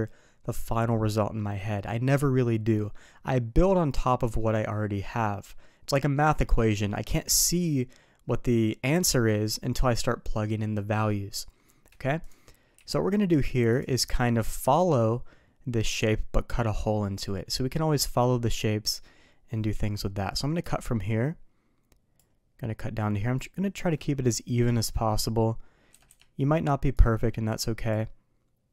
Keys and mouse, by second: 12.2 click, 12.7 d, 20.6-22.1 drag, 27.0-27.9 drag.